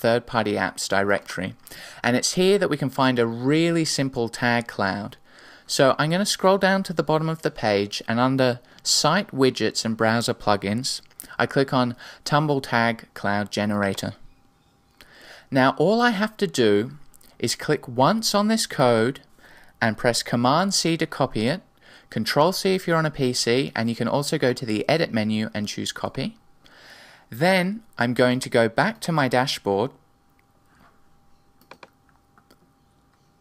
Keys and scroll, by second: 21.2 super+c.